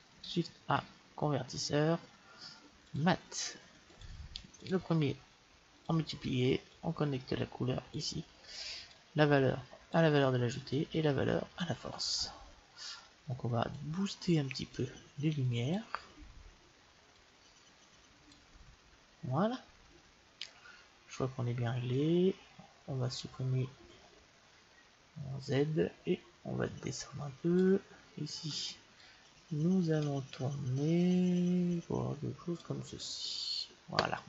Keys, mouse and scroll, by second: 0.7 shift+a, 4.6-6.6 drag, 6.8-8.4 drag, 9.0-10.7 drag, 10.8-12.5 drag, 13.7 click, 14.1 click, 14.8 click, 15.4 click, 17.3 click, 17.6 click, 25.8 click, 29.1 click.